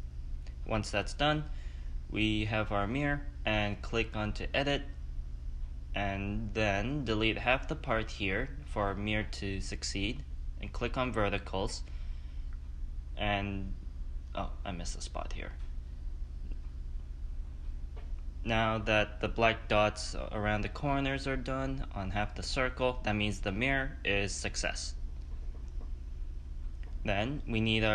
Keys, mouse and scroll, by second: 1.6-2.3 scroll up 4, 2.3-3.7 middle drag, 3.7-4.9 drag, 4.9-5.5 scroll up 2, 5.5 ctrl+z, 5.9 click, 6.3-7.6 middle drag, 7.6 click, 9.0 Delete, 10.5-13.5 middle drag, 16.1-17.6 drag, 17.6 Delete, 18.7-21.7 middle drag, 24.7 click, 26.2 click, 26.7 click.